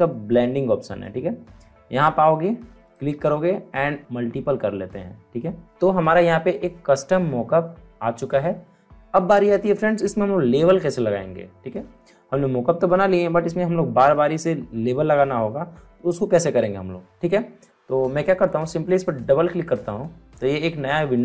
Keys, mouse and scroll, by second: 2.8 click, 5.6 click, 19.5 click.